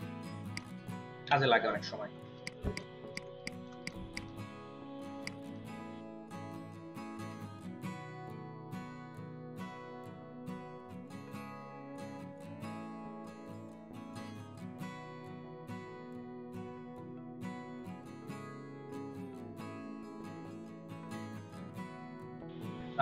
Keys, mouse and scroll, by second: 2.2 typing, 2.6 ctrl+alt+click, 3.0 ctrl+alt+double click, 3.6 space, 4.0 space, 4.2 double click, 9.4 v, 9.7 double click, 10.4 shift+middle click, 11.4-13.1 ctrl+shift+middle drag, 12.9 ctrl+space, 13.5 space, 16.0 double click, 16.9-18.3 shift+drag, 16.9 shift+middle click, 19.1 space, 19.8 ctrl+alt+click, 19.9 space, 20.3 space, 21.4 space, 21.7 ctrl+alt+click, 22.1 space.